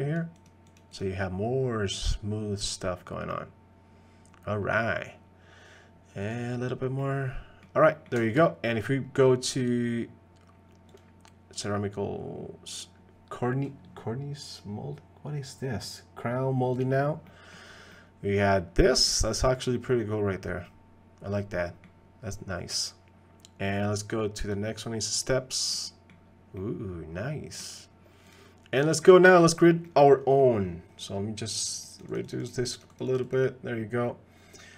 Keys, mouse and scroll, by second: 0.1 click, 2.0-2.8 middle drag, 3.3-4.8 middle drag, 6.2 click, 7.0 middle click, 7.9 middle click, 8.2 shift+middle click, 9.7-11.0 drag, 11.5-16.8 drag, 17.3 middle click, 17.9-19.0 middle drag, 19.4-21.8 middle drag, 24.4 click, 25.7 middle click, 26.5-27.6 drag, 28.3 click, 29.8 middle click, 30.4 middle click, 31.8 click, 32.1 click, 32.3 click, 32.9 click.